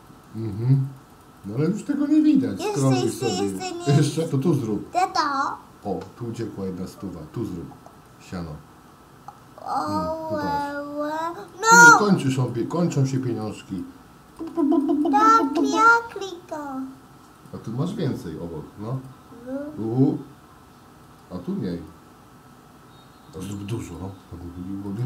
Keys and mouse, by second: 0.0 click, 0.2 click, 1.2 click, 1.5 click, 1.9 click, 2.2 click, 2.9 click, 3.2 click, 3.5 click, 3.7 click, 4.3 click, 8.0 click, 11.4 click, 11.7 click, 12.1 click, 12.3 click, 12.5 click, 12.7 click, 13.2 click, 13.4 click, 13.8 click, 14.6 click, 14.8 click, 15.0 click, 15.6 click, 21.1 click, 21.7 click, 23.8 click, 24.9 click.